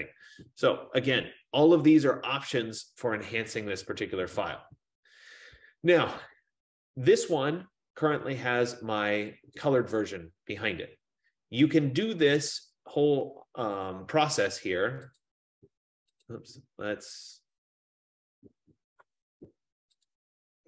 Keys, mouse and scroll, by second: 9.8 right click, 15.4 click, 16.3 click, 20.1 click.